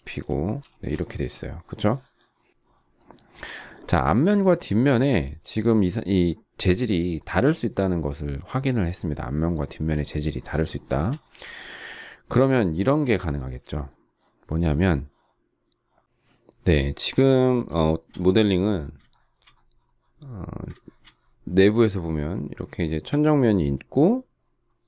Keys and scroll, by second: 0.7 space.